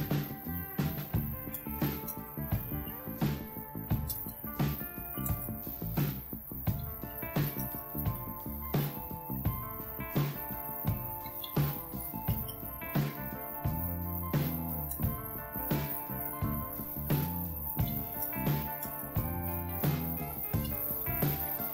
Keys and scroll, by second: 0.0-12.5 typing, 14.5-15.5 typing, 17.2-21.4 typing.